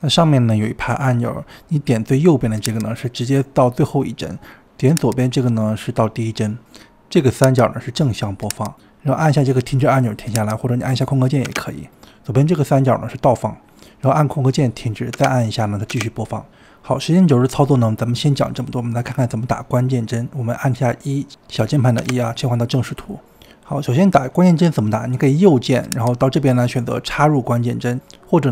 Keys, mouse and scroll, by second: 2.4-10.1 drag, 10.1 space, 10.6-11.5 drag, 11.5 space, 12.6 click, 15.1 space, 15.8 click, 16.0 space, 16.5 space, 17.4-21.9 drag, 22.0 KP_1, 23.3-26.0 shift+middle drag, 26.0-28.5 right drag.